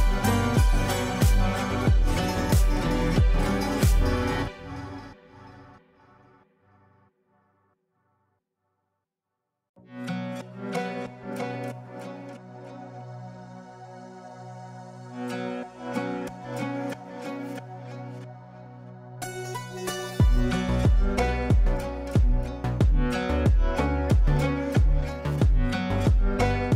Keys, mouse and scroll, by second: 1.2 ctrl+a, 1.8 shift+4, 2.8 space, 6.5 click, 7.9 F2, 8.2-9.2 drag, 13.0 ctrl+space, 14.0 Return, 16.2 ctrl+space, 17.3 right click, 18.6 click, 19.4 right click, 20.5-23.7 drag, 23.7 ctrl+space, 24.5 ctrl+a, 25.8-26.7 typing.